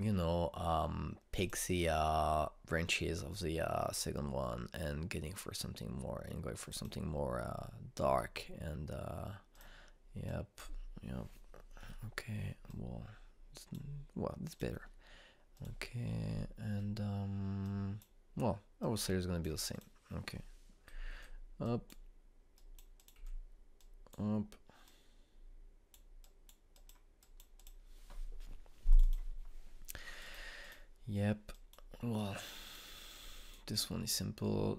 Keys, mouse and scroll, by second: 2.4 click, 7.6 click, 10.5 click, 12.8 Escape, 14.0-20.7 drag, 22.1 Delete, 22.6 click, 24.1 Delete, 24.7-34.7 drag.